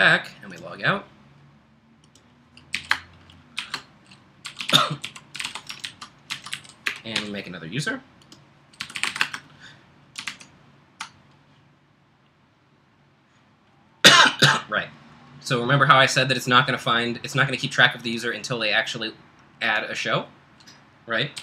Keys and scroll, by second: 2.7-5.5 typing, 5.9 alt+Left, 6.5 alt+Left, 6.9 BackSpace, 7.2 h, 10.3 super+Tab, 21.1-21.4 typing.